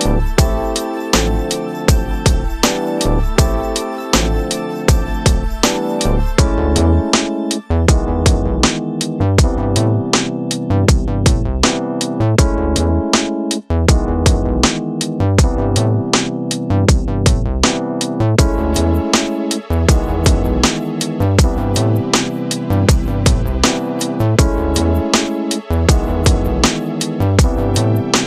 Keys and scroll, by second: 6.3 space, 13.7 ctrl+KP_Subtract, 15.5 space, 19.7 space, 20.1 w, 20.4 Return, 23.7 space, 24.4 c, 24.6 Return, 26.0 ctrl+space, 26.7 shift+F2, 27.7 space, 28.1 w.